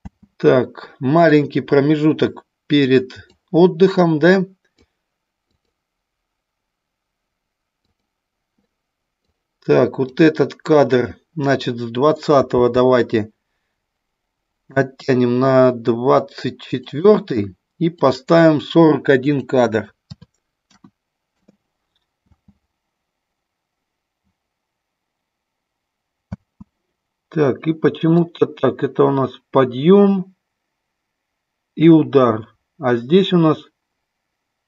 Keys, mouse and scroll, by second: 0.0 space, 1.3 click, 3.3-4.8 drag, 5.6 click, 7.8 click, 9.1 click, 12.7 g, 16.8 click, 17.9 click, 19.2-21.4 drag, 22.3 space, 26.3 space, 28.3-34.6 drag.